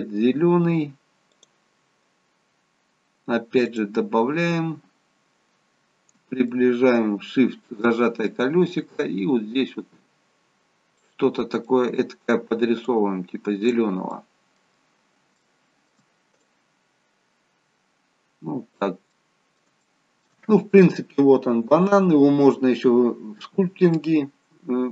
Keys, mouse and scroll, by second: 5.0-6.1 scroll up 4, 6.4 shift+middle click, 8.3 click, 11.3-11.6 scroll down 2, 11.6 middle click, 12.8 click, 14.1 middle click, 14.8-15.3 scroll down 2, 15.3 shift+middle click, 16.4 click, 19.1 middle click, 19.8 shift+middle click.